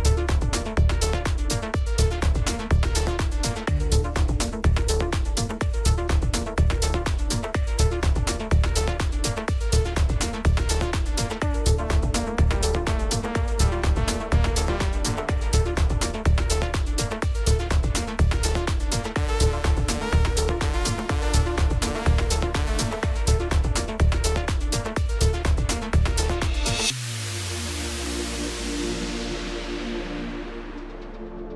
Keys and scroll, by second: 4.4 ctrl+shift+g, 5.3 ctrl+space, 7.2 ctrl+g, 7.4 ctrl+z, 13.8 ctrl+g, 21.4 Delete.